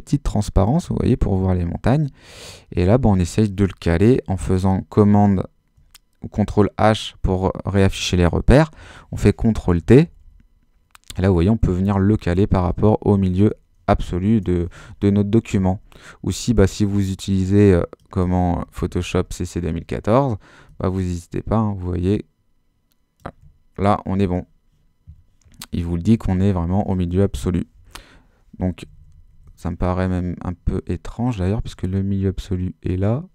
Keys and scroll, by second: 4.3 super+h, 5.0 super++, 8.7 super+t, 9.8 super+Left, 11.8 Right, 12.3 Left, 12.6 Right, 18.8 shift+super++, 26.0 super+-, 27.7 super+t.